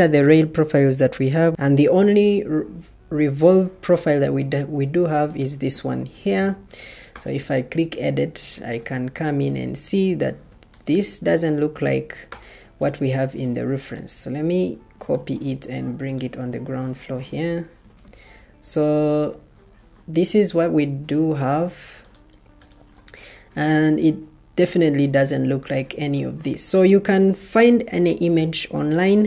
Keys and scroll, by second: 9.6 Escape, 14.8 ctrl+c, 17.7 ctrl+v.